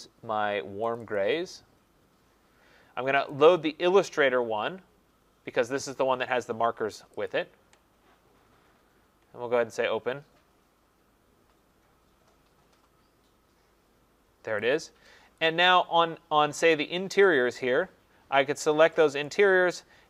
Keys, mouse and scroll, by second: 1.0 click, 1.2 click, 3.3 click, 7.2 click, 7.3 click, 15.4 click, 17.3 click, 19.3 click.